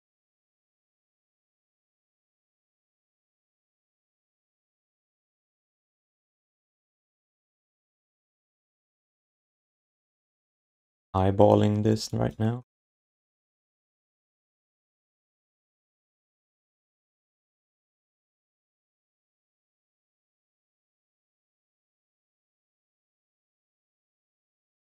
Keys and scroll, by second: 1.9 q, 2.6 alt+shift+d, 2.7 1, 6.5 q, 7.7 w, 9.2 r, 12.8 e, 15.7 r, 17.8 r, 21.7 w, 23.4 w.